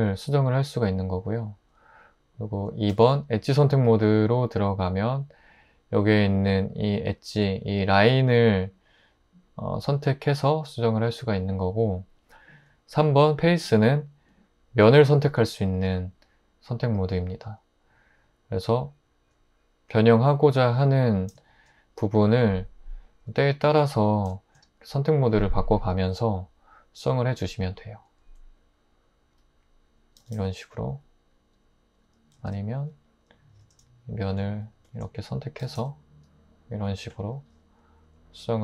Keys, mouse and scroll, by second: 2.9 2, 13.0 3, 23.6 1, 30.2 typing, 32.4 super+z, 32.7 super+z, 35.6 typing.